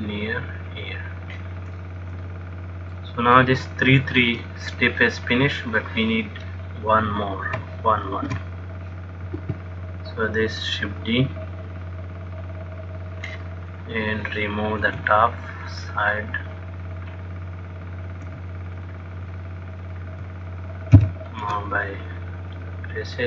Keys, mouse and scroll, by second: 2.1 middle click, 3.8 shift+middle click, 8.9 shift+d, 10.5 click, 14.0 click, 15.1 b, 18.5 x, 20.1 click, 21.3 ctrl+l, 22.8 click.